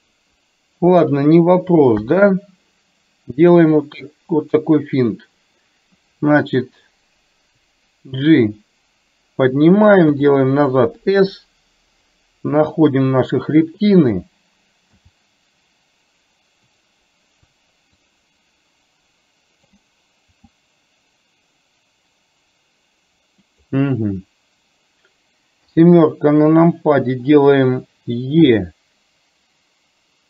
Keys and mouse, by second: 1.9 KP_1, 3.9 click, 7.7-9.6 drag, 18.2-19.7 drag, 25.7 KP_7, 28.4 e.